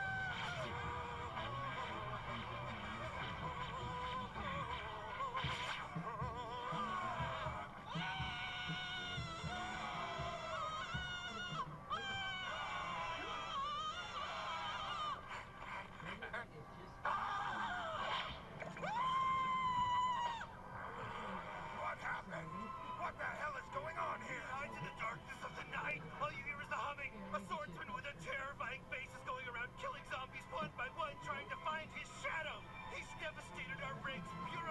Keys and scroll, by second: 20.1 Delete.